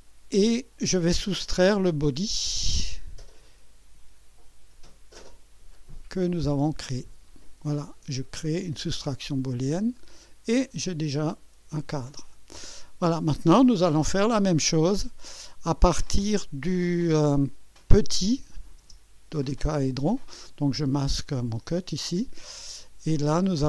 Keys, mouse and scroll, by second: 7.3 ctrl+click, 9.3 click, 10.7-13.5 drag, 18.4 click, 18.8 space, 21.2 click, 21.6 space, 22.5-23.4 drag.